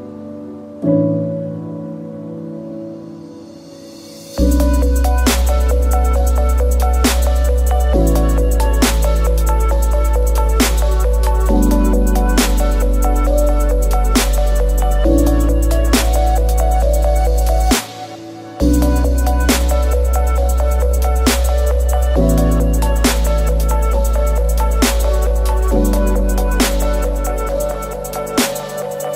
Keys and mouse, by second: 2.6 KP_3, 3.7 shift+drag, 4.0 shift+s, 5.8 shift+a, 8.2 z, 8.9 shift+drag, 9.7-11.5 drag, 12.4 Tab, 12.8 a, 13.3 a, 13.6 r, 16.1 s, 17.5 s, 18.3 g, 19.6 shift+click, 20.4 s, 22.5 g, 24.0 s, 25.3 g, 27.2-27.5 shift+drag, 28.3 s.